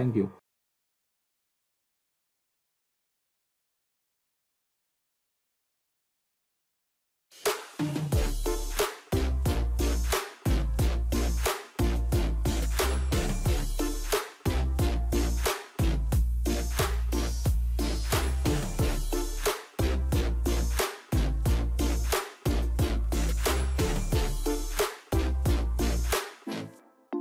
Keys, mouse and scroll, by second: 3.7 scroll down 1, 3.8-4.7 scroll up 1, 6.4 click.